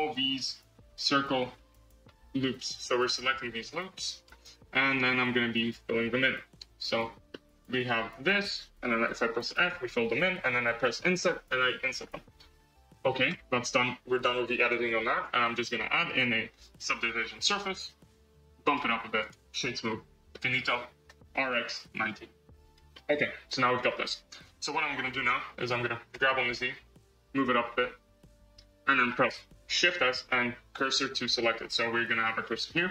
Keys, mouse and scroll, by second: 0.7 alt+shift+click, 2.3 alt+shift+click, 3.5 alt+shift+click, 4.1 alt+shift+click, 5.8 alt+shift+click, 6.7 alt+shift+click, 7.2-8.0 middle drag, 8.0 alt+z, 9.4 f, 10.7 i, 13.2 Tab, 13.2 Tab, 13.6 Tab, 15.0 click, 15.6 click, 15.9-18.4 drag, 18.6 click, 19.1-20.2 right drag, 20.2-21.0 middle drag, 21.0 r, 22.8-23.8 middle drag, 23.8 scroll, 24.6 KP_1, 26.0 g, 29.0 scroll, 29.7 shift+s, 31.5-32.4 scroll up 5, 32.4-32.9 shift+middle drag.